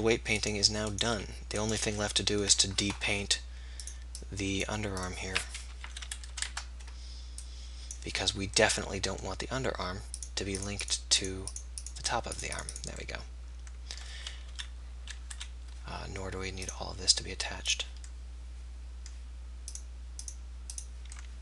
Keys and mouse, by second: 1.2 r, 2.0-4.3 drag, 4.7-15.3 drag, 14.6 KP_3, 15.3 KP_1, 16.7-18.7 drag, 19.7-21.4 drag.